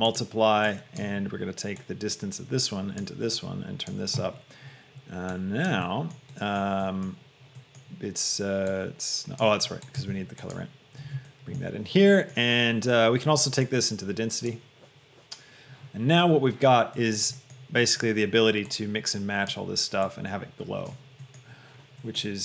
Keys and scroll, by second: 10.4 shift+d.